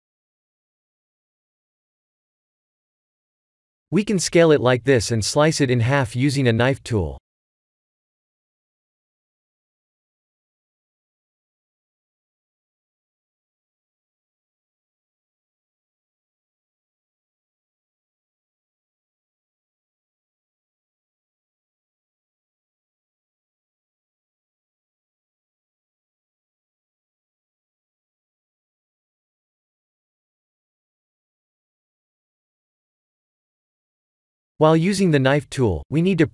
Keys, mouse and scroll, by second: 1.8 s, 8.6 middle click, 10.2 s, 12.8 KP_1, 14.3 s, 20.9 middle click, 22.0 scroll up 4, 22.9 middle click, 26.1-26.6 scroll down 2, 26.5 middle click, 27.7 Tab, 28.3 middle click, 29.5 shift+z, 30.7 KP_2, 31.3 KP_1, 31.6 KP_3, 34.8 k.